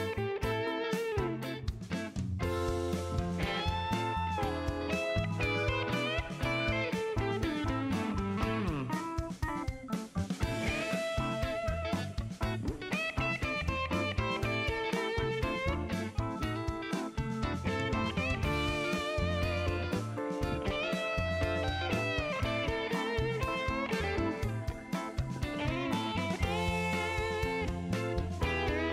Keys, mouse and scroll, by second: 1.3 click, 1.7 click, 2.5 shift+right click, 3.3 scroll up 1, 3.8 middle click, 6.9 click, 8.4 click, 10.3 click, 12.0 scroll down 1, 12.4 shift+right click, 13.8 shift+scroll up 1, 14.5 shift+right click, 16.3 shift+scroll up 1, 17.2 shift+right click, 18.4 shift+middle click, 19.0 shift+right click, 19.8 shift+scroll down 1, 20.4 scroll down 1, 21.1 shift+right click, 22.6 shift+right click, 25.3 click, 26.3 click, 28.7 shift+right click.